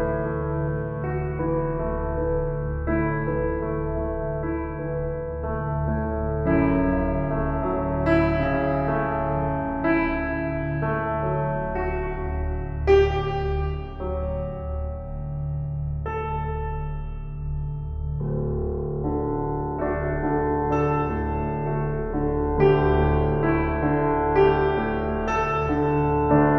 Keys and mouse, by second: 0.0-0.9 drag, 1.0 shift+click, 1.6 shift+click, 2.6 shift+click, 3.4 shift+click, 4.1 shift+click, 5.1 shift+click, 5.8-6.1 ctrl+alt+drag, 6.6 shift+click, 7.3 shift+click, 8.2 click, 9.0-9.4 ctrl+alt+drag, 9.9 shift+click, 10.6 shift+click, 11.6 shift+click, 12.3 shift+click, 13.6 g, 14.3 Escape, 15.1-19.0 shift+drag, 16.5 typing, 19.3 ctrl+alt+click, 19.7 ctrl+alt+drag, 20.5 g.